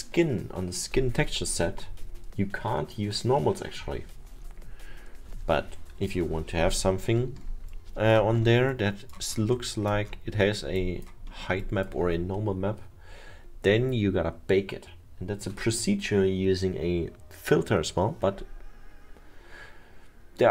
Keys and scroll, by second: 7.4 alt+7.